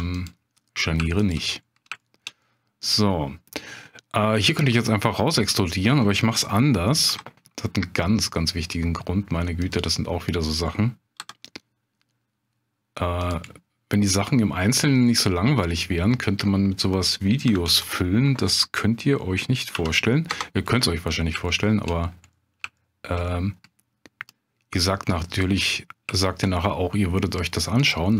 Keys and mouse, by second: 0.1 click, 1.2 shift+click, 2.0 shift+click, 2.4-3.7 middle drag, 4.1 middle click, 5.4 middle click, 6.5 middle click, 7.0 i, 9.6 click, 10.0 middle click, 11.2 e, 13.2 middle click, 13.4 middle click, 15.0 middle click, 16.1 middle click, 17.4 s, 17.7 x, 19.7 0, 20.3 Return, 20.8 middle click, 21.5 shift+middle click, 22.3 middle click, 22.8 shift+click, 23.3 middle click, 24.3-25.4 drag, 25.7 middle click, 26.2 shift+click, 26.6 middle click.